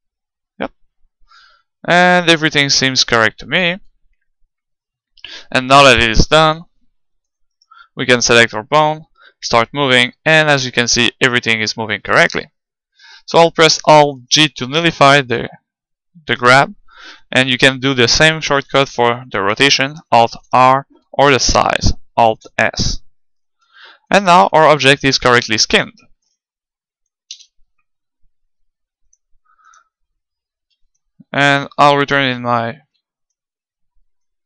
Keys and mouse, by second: 5.9-9.3 right drag, 6.8-8.5 middle drag, 8.3 g, 12.2-14.1 right drag, 14.1 alt+g, 15.1-17.0 middle drag, 17.6 r, 18.8-20.7 drag, 20.1 alt+r, 21.1 s, 21.9-23.6 drag, 22.3 alt+s, 24.1 ctrl+Tab, 25.2-28.0 middle drag, 27.3 z, 29.2-30.8 drag, 30.7 alt+Up, 32.8 alt+Down.